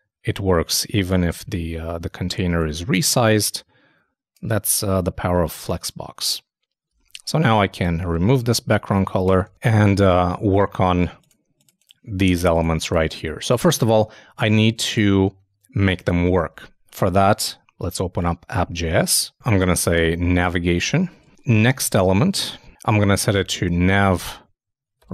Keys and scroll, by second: 7.0 super+Tab, 8.4 super+Left, 8.9 shift+super+Left, 9.0 shift+super+Down, 9.2 shift+BackSpace, 9.4 super+s, 10.1 super+Tab, 16.5 super+Tab, 21.0-23.8 typing.